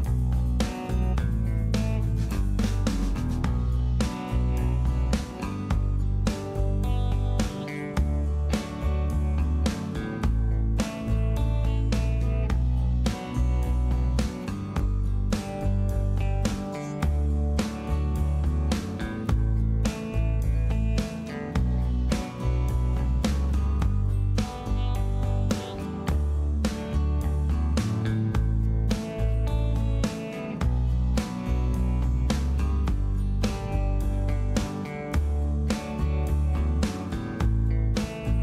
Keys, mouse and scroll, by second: 0.4 typing, 9.9 1, 13.9 2, 20.3 h, 35.9 F2, 36.8 o.